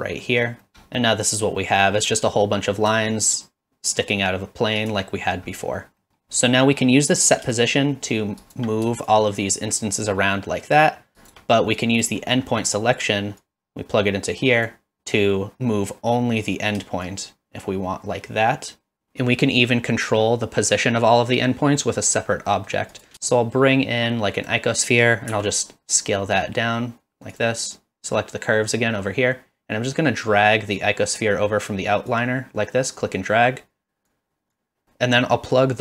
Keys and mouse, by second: 0.2 middle click, 1.0-1.4 middle drag, 1.8 middle click, 3.2-4.9 shift+drag, 6.0 middle click, 7.6 shift+click, 9.2-11.3 shift+drag, 11.8 click, 12.6 middle click, 13.6-14.7 drag, 17.0-19.1 shift+drag, 22.5 middle click, 23.1 shift+a, 27.3 click, 32.1-34.1 drag, 34.6 drag.